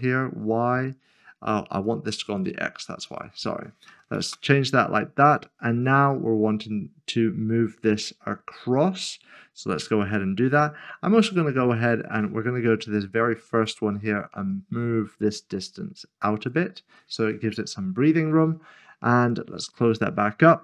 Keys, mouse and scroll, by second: 1.8 click, 4.3 Return, 13.6 Return, 13.7 click, 19.9 click.